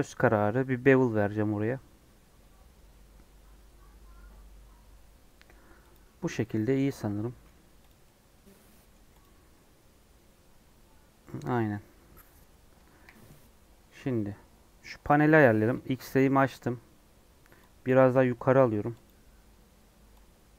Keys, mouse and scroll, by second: 6.3-7.4 middle drag, 7.4 Tab, 7.8 click, 7.9-9.1 middle drag, 9.1 click, 9.7 scroll down 1, 12.9 KP_1, 13.2 Tab, 14.9 1, 15.6 alt+z, 16.4 click, 17.8 click, 17.9 g.